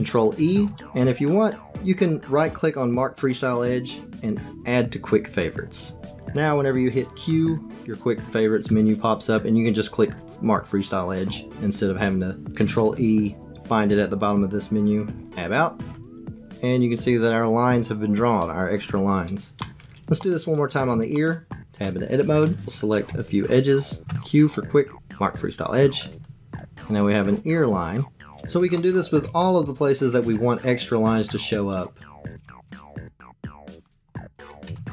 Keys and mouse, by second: 0.3 ctrl+e, 7.2 q, 8.6 q, 12.6 ctrl+e, 15.3 Tab, 19.6 middle click, 21.1 shift+middle click, 21.5 Tab, 23.3 shift+middle click, 24.0 q, 26.1 Tab, 28.7 shift+middle click, 29.0 shift+click, 30.2 Tab, 32.3 click, 32.6 click, 32.7 shift+click, 33.2 shift+click, 33.6 shift+click, 33.8 click, 34.4 shift+click, 34.6 q.